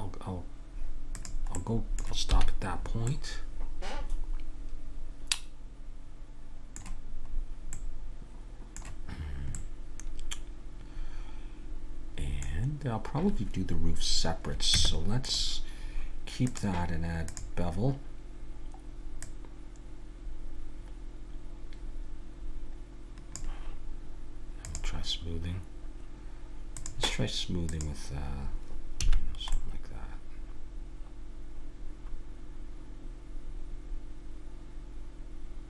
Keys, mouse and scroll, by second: 1.2-2.8 drag, 2.3 a, 2.8-4.9 middle drag, 7.3-12.5 middle drag, 14.8 Tab, 16.4-18.3 drag, 19.2-21.0 drag, 24.6-26.5 drag, 26.7-29.3 drag, 29.1 a, 29.3 middle click, 30.9 middle click.